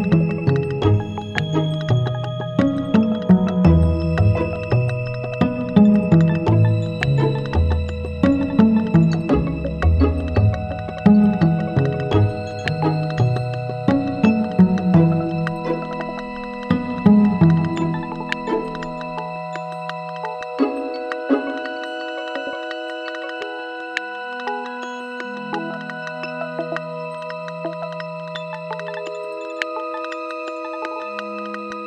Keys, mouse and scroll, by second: 0.5 right click, 1.4 g, 2.7 click, 7.8 click, 8.6 click, 10.0 click.